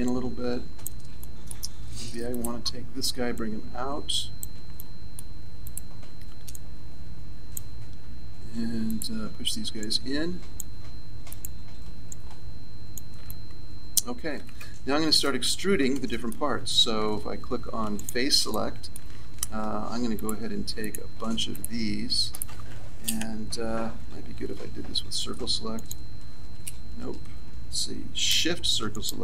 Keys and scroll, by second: 23.7 c.